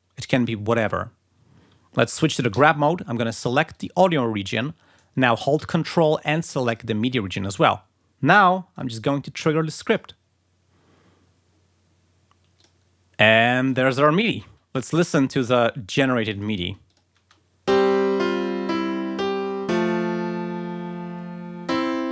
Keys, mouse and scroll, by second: 2.4 g, 3.7 click, 6.6 ctrl+click, 9.9 click, 12.5 click, 12.8 scroll down 2, 15.4 click, 16.2 click, 16.8 click, 17.1 space.